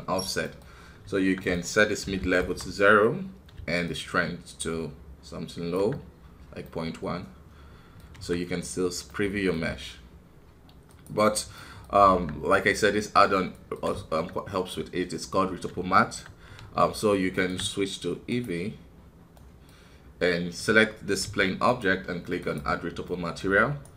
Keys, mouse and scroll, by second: 8.1 KP_1, 8.7-9.1 scroll down 1, 9.1-11.3 middle drag, 11.3 click, 11.5 middle click, 12.0 Tab, 12.5-16.3 middle drag, 16.3 scroll up 1, 18.3-19.3 drag, 19.3-23.8 middle drag, 23.8-23.9 right drag.